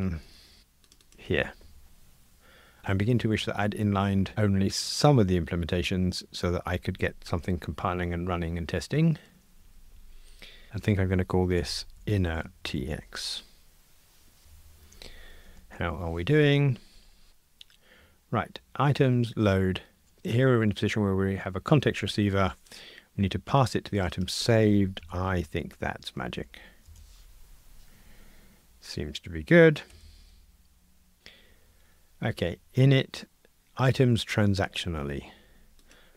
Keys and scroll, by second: 0.2 super+c, 1.3 super+v, 10.7 super+z, 11.6 shift+F6, 15.5 ctrl+r, 27.0 Return, 29.9 super+F9, 36.0 super+b.